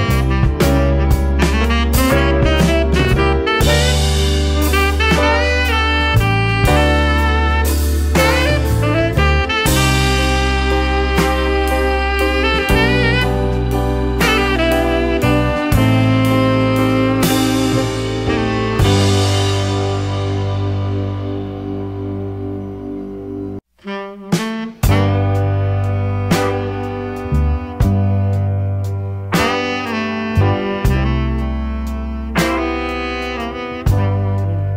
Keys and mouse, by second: 1.2 BackSpace, 3.1-3.9 middle drag, 4.7-5.8 drag, 9.4 click, 12.6-16.6 drag, 18.3 click, 18.6-19.7 drag, 20.0-21.1 drag, 21.9-22.4 middle drag, 22.6 KP_0, 25.4 click, 26.4 drag, 26.7-28.1 middle drag, 28.6-30.5 middle drag, 30.8-31.6 middle drag, 33.4 middle click.